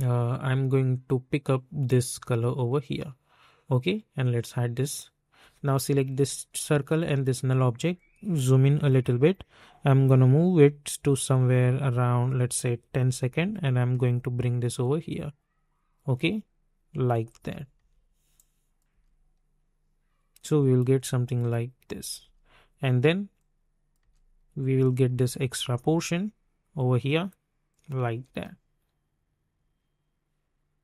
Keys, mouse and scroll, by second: 1.4 click, 4.9 click, 7.0 shift+click, 8.5 typing, 10.5 typing, 11.2-12.9 drag, 12.9-13.9 typing, 16.9 space, 18.3 click, 18.9 space, 20.9 space, 23.3 click, 23.9 space, 27.7 click, 28.0 space.